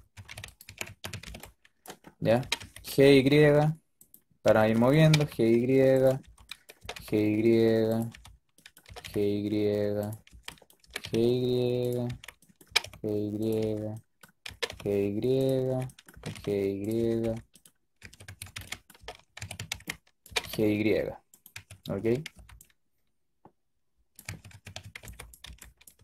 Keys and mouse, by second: 0.0-1.1 typing, 2.3 g, 4.3 b, 4.9 g, 6.1 b, 6.7 g, 8.0 b, 8.7 g, 10.2 b, 10.7 g, 11.9 b, 12.5 g, 14.3 g, 15.5 b, 16.0 g, 17.9-20.1 typing, 21.4 a, 21.7 a, 22.0 a, 22.2 b, 24.2-26.0 typing.